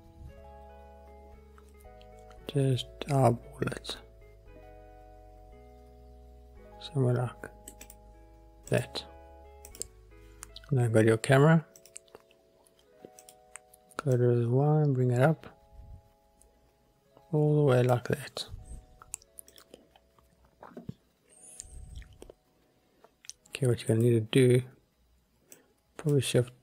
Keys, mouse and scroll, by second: 8.8 click, 9.8 click, 11.9 click, 13.3 click, 14.3-18.1 drag, 19.6 click, 24.1 click, 25.7 click.